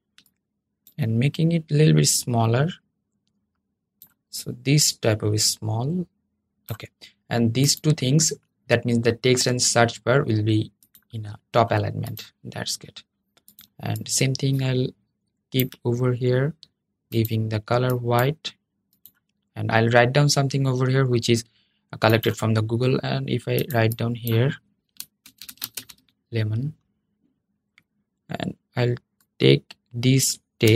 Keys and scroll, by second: 30.4 super+c.